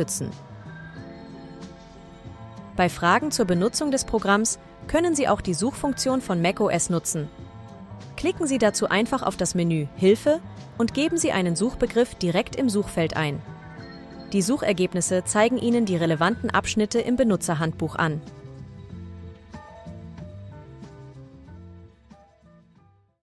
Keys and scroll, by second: 5.5-6.7 typing, 10.5 BackSpace, 11.9-13.3 typing.